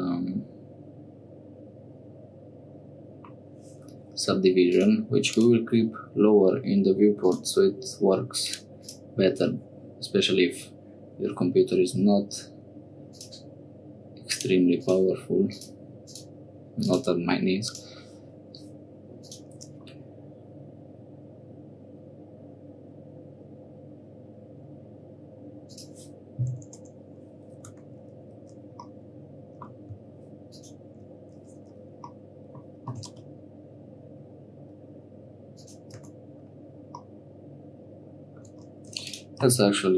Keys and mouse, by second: 2.8 click, 3.1 click, 4.9 click, 7.2 click, 8.4 click, 8.8 click, 13.1 click, 14.3 click, 14.8 click, 16.1-19.3 drag, 25.6 click, 26.7 Tab, 27.6 3, 28.9 click, 32.1 middle click, 32.8 g, 36.0 Tab, 37.0-38.5 middle drag, 38.5 Tab, 38.9 3, 39.0 click, 39.4 x.